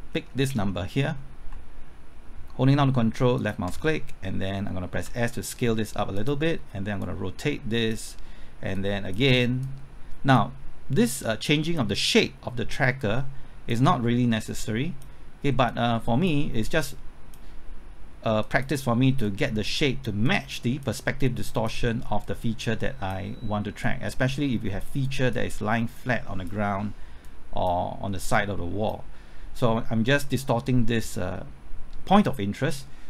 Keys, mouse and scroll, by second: 0.2 scroll up 1, 0.7 middle click, 1.5 typing, 3.4 ctrl+click, 5.0 s, 6.1-33.0 drag.